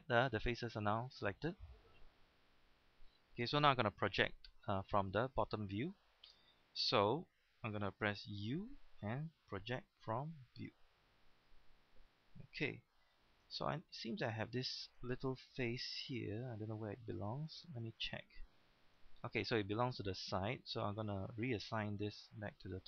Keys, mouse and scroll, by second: 5.0-5.6 scroll up 1, 8.4 u, 10.1-11.4 drag, 13.1 shift+middle click, 13.5-13.8 scroll up 1, 14.3 scroll up 1, 14.7 shift+middle click, 16.0 right click, 17.0 scroll up 1, 17.6 scroll up 1, 18.4-19.2 shift+scroll up 3, 19.4-20.0 scroll down 1.